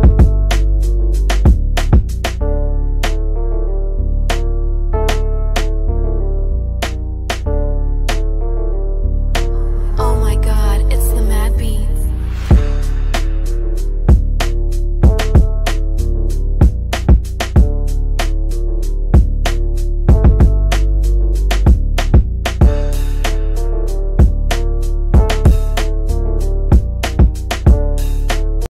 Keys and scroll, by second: 23.2 shift+F2, 23.9 Escape.